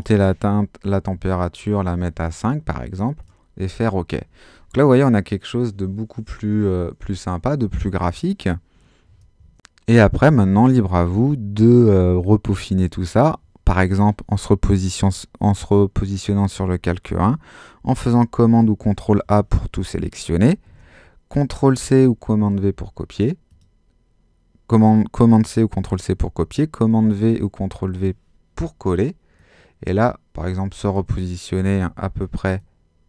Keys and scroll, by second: 1.1 5, 17.1 super+a, 21.8 super+c, 27.0 super+v, 31.8 super+-.